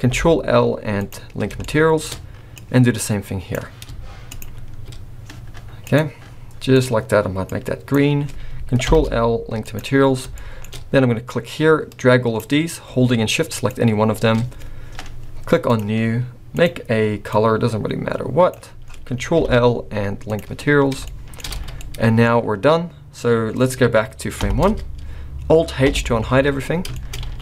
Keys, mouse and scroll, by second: 0.1 ctrl+l, 1.5 shift+scroll up 1, 1.7 shift+middle click, 2.5 click, 4.3 shift+click, 5.8 click, 6.7 click, 8.9 ctrl+l, 10.0 scroll down 3, 10.3 shift+middle click, 10.6-11.0 shift+scroll up 3, 11.3 click, 13.6 shift+click, 15.7 click, 16.5 click, 19.4 ctrl+l, 21.0 shift+middle click, 21.5 alt+a, 21.7 scroll down 2, 21.8 middle click, 24.4 shift+Left, 25.9 alt+h, 26.5-26.9 scroll down 5, 26.9 shift+middle click, 27.1-27.4 scroll up 2, 27.3 alt+a.